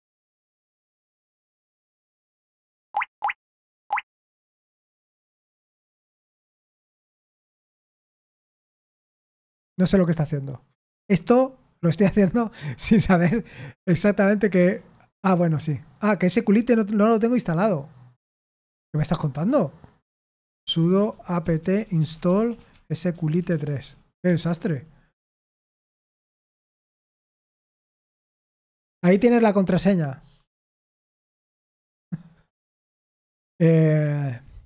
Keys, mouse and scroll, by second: 3.7-5.8 typing, 21.6-24.7 typing, 28.7 typing, 29.1 Return.